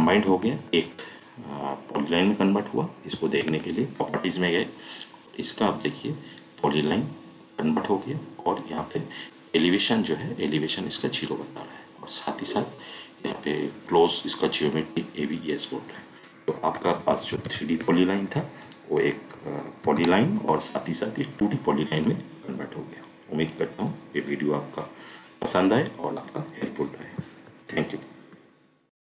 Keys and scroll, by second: 3.1 ctrl+1, 17.4 ctrl+1, 19.8 Escape.